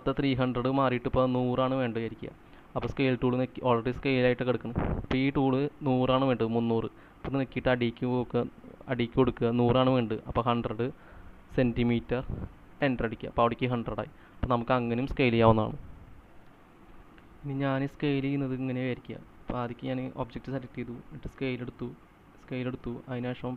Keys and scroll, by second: 10.4-13.4 typing, 16.7 Escape, 16.7 c, 20.2 space, 22.2 space.